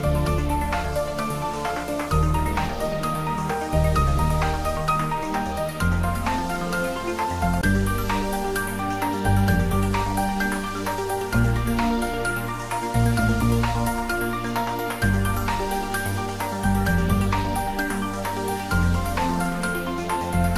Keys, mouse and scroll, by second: 2.3 scroll down 1, 4.7-5.2 scroll down 1, 5.2 shift+click, 8.6 shift+click, 10.4-11.0 scroll down 1, 14.3-14.6 scroll down 1, 14.6 shift+click, 18.2 shift+click, 20.4-20.5 scroll down 1.